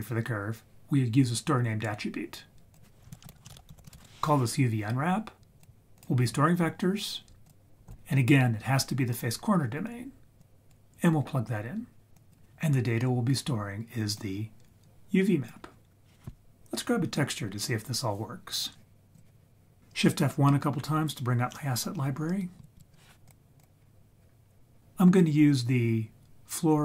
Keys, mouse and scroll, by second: 2.7-4.0 drag, 5.6-6.0 drag, 7.4-7.9 drag, 10.4 drag, 12.1 click, 14.2 click, 14.4-15.5 drag, 19.1 click, 19.8 click, 22.6 shift+F1, 22.7 shift+F1, 23.2-23.7 drag.